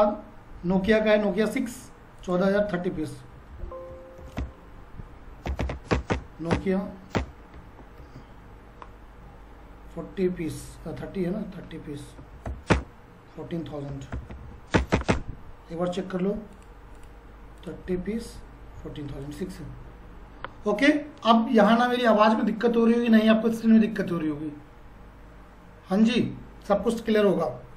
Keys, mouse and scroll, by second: 2.2 click, 3.5 alt+c, 3.9-6.1 typing, 7.1 Return, 8.0 ctrl+a, 12.1-14.9 typing, 12.7 Return, 16.6 click.